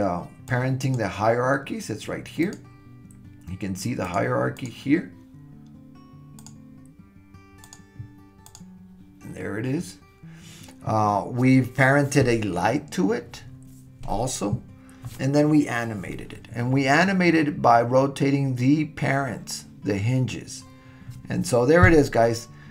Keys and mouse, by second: 0.5 click, 2.4 click, 4.0 click, 4.6 click, 6.4 click, 7.6 click, 8.5 click.